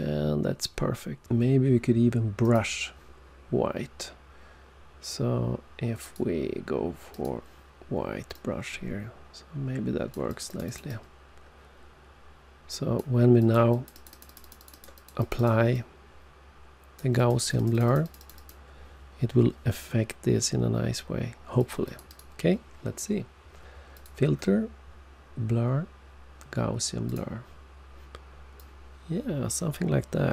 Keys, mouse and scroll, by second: 2.3 click, 5.9 click, 7.0 click, 8.3 click, 10.2 click, 10.4 click, 10.5 double click, 10.6 click, 10.8 click, 13.3 click, 13.6 click, 13.8 double click, 13.8 click, 14.0 click, 14.1 double click, 14.2 double click, 14.3 double click, 14.4 double click, 14.5 double click, 14.7 double click, 14.9 double click, 15.1 double click, 15.2 double click, 15.3 double click, 15.6 double click, 17.1 click, 17.3 click, 17.4 double click, 17.5 click, 17.7 double click, 17.8 double click, 18.1 double click, 18.2 double click, 18.3 double click, 18.4 double click, 21.5 click, 21.8 click, 21.9 double click, 22.0 double click, 23.9 click, 27.0 click, 28.5 click.